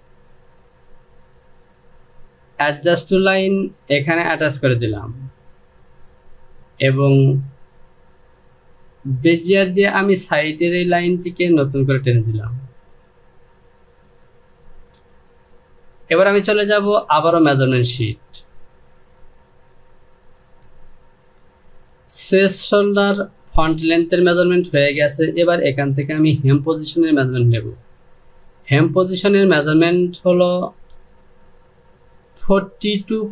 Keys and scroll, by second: 14.7 Delete.